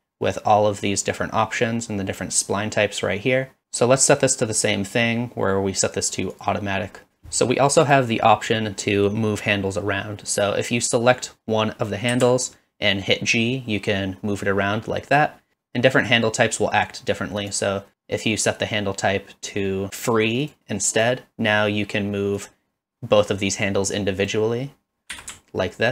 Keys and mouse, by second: 6.4 right click, 7.8 click, 12.1 g, 15.5-16.9 right drag, 21.0 click, 25.1 g.